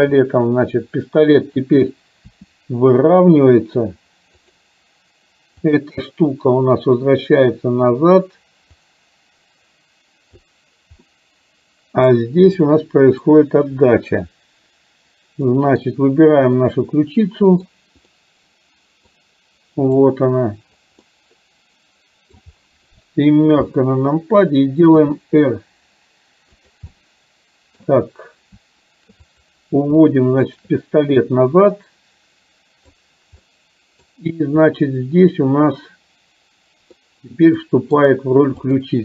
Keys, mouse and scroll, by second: 2.3 r, 5.8 click, 9.0-10.6 drag, 11.1-12.1 middle drag, 12.8-13.3 middle drag, 15.6 middle drag, 15.8-16.6 scroll down 1, 16.7-17.7 middle drag, 18.2-19.2 middle drag, 19.8 click, 21.1-22.5 middle drag, 23.7 KP_7, 25.1 r, 27.0-28.0 middle drag, 32.0-33.1 drag, 33.6-34.1 middle drag, 34.1-34.7 scroll down 1, 37.1-37.6 middle drag, 37.7 middle drag, 38.0 scroll down 1, 38.1-38.7 middle drag, 38.7 drag.